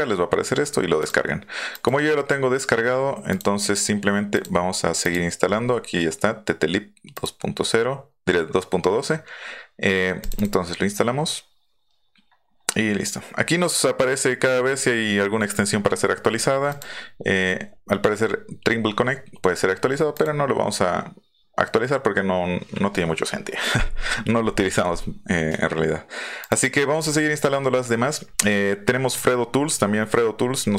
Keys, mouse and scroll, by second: 1.0 click, 1.7 click, 3.3-4.4 drag, 5.0 click, 7.1 click, 10.2 click, 10.3 click, 16.7 click, 20.1 click, 26.4 click.